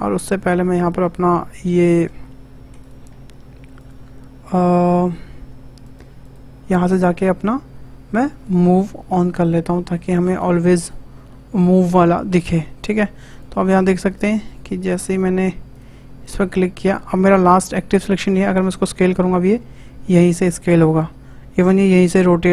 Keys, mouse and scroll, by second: 0.9 click, 3.1 Tab, 3.8-5.9 drag, 6.2-9.2 drag, 10.8-12.3 drag, 12.3 Tab, 13.3 shift+click, 14.1 shift+click, 14.4 shift+click, 15.0 shift+click, 15.7 shift+click, 16.2 shift+click, 16.8 shift+click, 18.6 s, 21.6 r, 21.8 r.